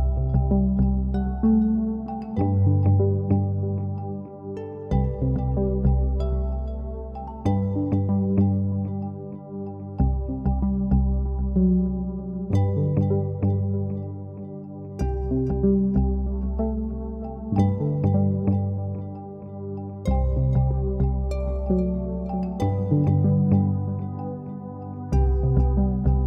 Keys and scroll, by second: 12.7-13.7 typing, 17.8-18.9 typing, 23.7-24.4 typing.